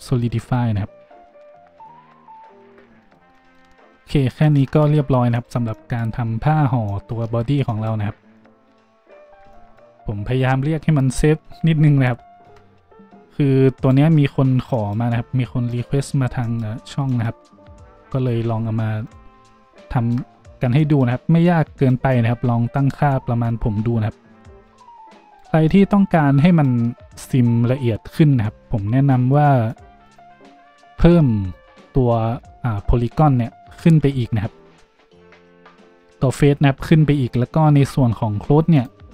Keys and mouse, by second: 0.0-5.3 middle drag, 1.0 Tab, 1.7 a, 4.2 shift+z, 5.3 click, 5.4-5.7 middle drag, 7.8 a, 7.9 click, 7.9 middle click, 9.6-13.8 middle drag, 13.8 click, 13.8-17.0 middle drag, 14.8 a, 17.2-19.0 middle drag, 19.0 click, 19.1-24.4 middle drag, 20.9 a, 24.4 drag, 24.6 middle click, 25.8 middle click, 25.8-30.0 middle drag, 30.0 click, 30.1-38.8 middle drag, 32.5 Tab, 33.9 Tab, 38.8-39.1 drag.